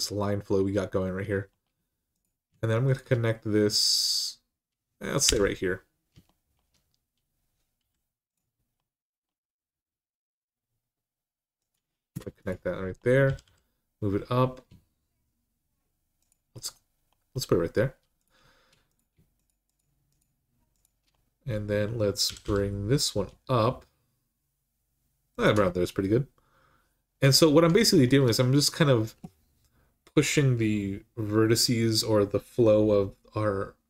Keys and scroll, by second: 5.0 j, 7.6 k, 11.9 Return, 13.0 g, 13.2 g, 16.3 typing, 22.0 typing.